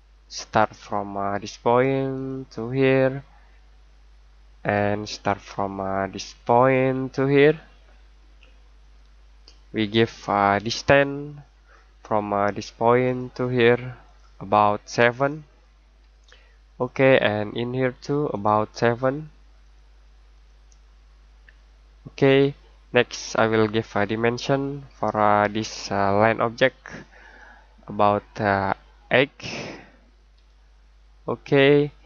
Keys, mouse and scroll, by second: 1.7 click, 2.1 click, 4.6 click, 16.0 7, 16.8 click, 21.3 7, 22.2 click, 24.9 click, 30.3 8, 31.4 click.